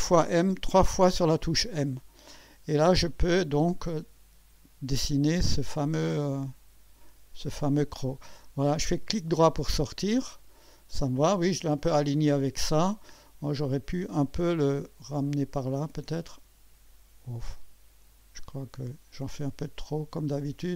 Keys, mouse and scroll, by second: 0.6 m, 6.2 click, 9.4 right click, 10.3 scroll up 1, 13.5 right click, 14.9 click, 16.1-17.5 drag, 18.4 click.